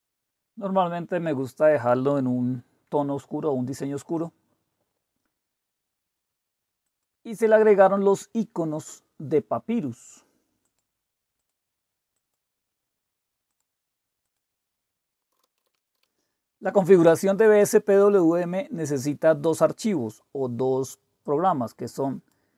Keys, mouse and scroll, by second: 6.8 click, 10.6 click, 11.4 click, 12.1 click, 13.5 click, 14.3 click, 15.1-16.5 typing, 21.3-22.4 drag.